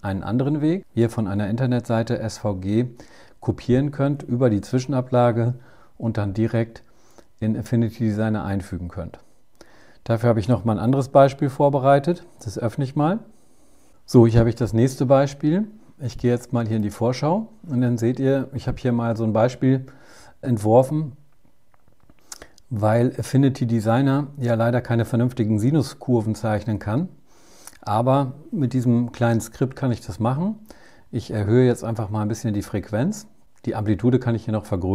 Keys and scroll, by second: 12.5 super+o.